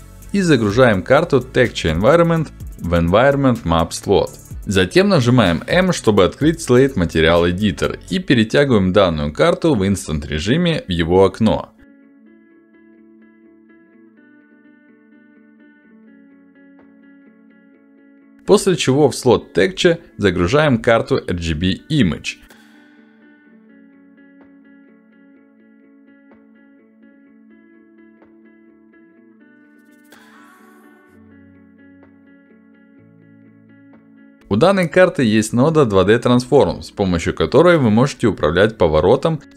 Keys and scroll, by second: 6.7 m, 13.8 ctrl+alt+d, 21.5 ctrl+alt+d, 28.0 ctrl+alt+d.